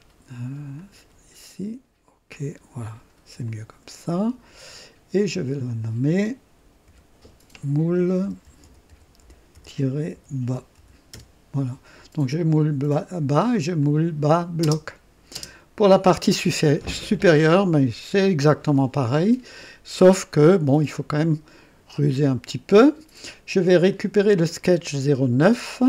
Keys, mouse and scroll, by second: 0.7 click, 2.3 click, 3.4 click, 5.6 click, 6.9 F2, 7.9-11.2 typing, 13.7-15.3 typing, 13.8 click, 20.4-22.0 drag, 23.8 click.